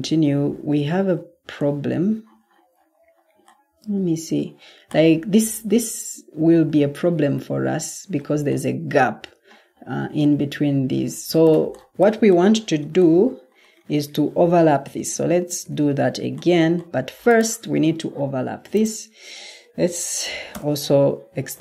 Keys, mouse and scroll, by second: 10.6 Escape, 14.8 ctrl+z, 15.5 ctrl+z, 19.8-20.4 typing.